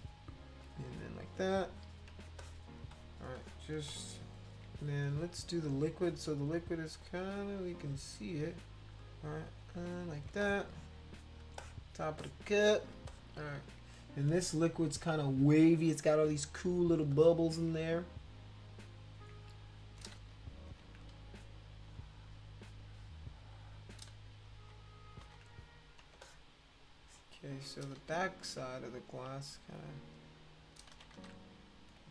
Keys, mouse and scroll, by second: 0.6 click, 1.7 click, 2.3 space, 2.4 click, 2.9 click, 3.3 click, 3.9 click, 5.8 click, 6.6-8.2 drag, 8.3 click, 8.5 click, 8.9 click, 9.4 click, 10.3 space, 10.4 click, 11.6 click, 12.2 click, 13.1 click, 15.9 space, 17.1 click, 18.9 click, 19.6 click, 20.2 ctrl+z, 20.7 ctrl+z, 21.7 click, 22.6 click, 22.9 click, 23.2 click, 24.3 ctrl+z, 24.6 ctrl+z, 25.2 ctrl+z, 26.2 space, 26.2-27.5 drag, 27.9 ctrl+z, 29.3-30.7 drag, 30.9 ctrl+z, 31.1 ctrl+z.